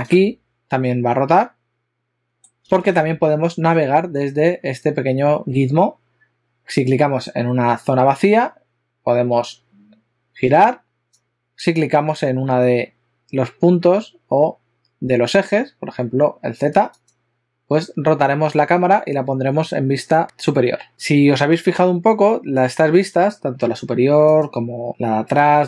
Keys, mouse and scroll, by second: 1.1 middle click, 8.5 click, 17.0 click, 24.3 click.